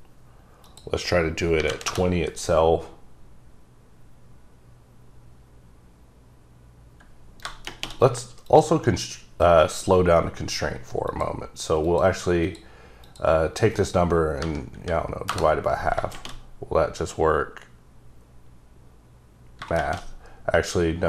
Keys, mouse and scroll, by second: 0.6 click, 1.6 KP_2, 1.8 KP_Enter, 1.8 KP_0, 7.5 shift+KP_Enter, 8.4 click, 9.7 click, 11.1 click, 11.8 click, 12.4 click, 14.4 KP_Divide, 14.8 KP_2, 15.3 KP_Enter.